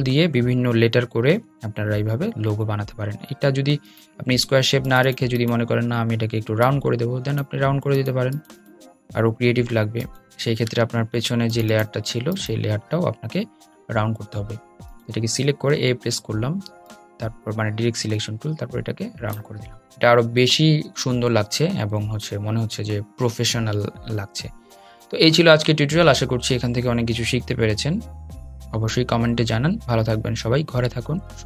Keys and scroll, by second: 5.4 a, 13.0 a.